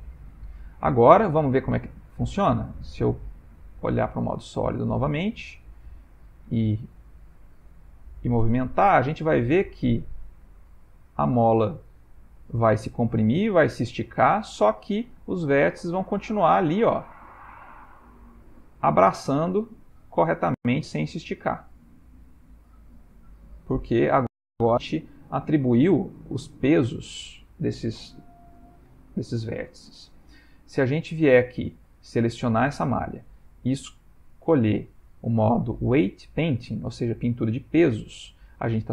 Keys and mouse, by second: 0.0 ctrl+middle click, 2.4 click, 3.0 z, 4.6 ctrl+middle click, 6.6 g, 11.7 ctrl+middle click, 12.6 shift+middle click, 13.1 ctrl+middle click, 16.5 ctrl+middle click, 17.4 s, 19.0 g, 27.4 ctrl+middle click, 28.2 ctrl+middle click, 29.0 shift+middle click, 29.2 shift+middle click, 29.5 ctrl+middle click, 30.4 ctrl+middle click, 31.4 shift+middle click, 32.4 click, 34.4 click.